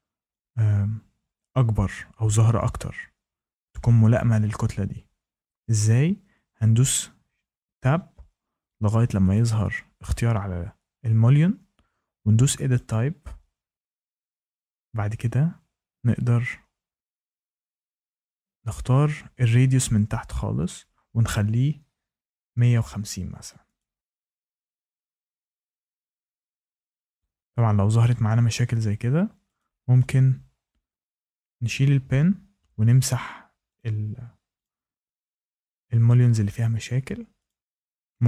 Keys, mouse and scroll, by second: 0.2-5.3 drag, 6.6 Tab, 7.2 Tab, 7.7 Tab, 9.3 click, 12.7 click, 17.4 click, 18.6 click, 20.6 click, 22.0-23.4 typing, 23.7 click, 27.1 shift+middle click, 29.5 click, 31.3 click, 32.1 Delete, 33.7 click, 34.6 click, 34.9 Delete, 36.4 click, 37.4 click, 37.5 shift+middle click, 37.5 click.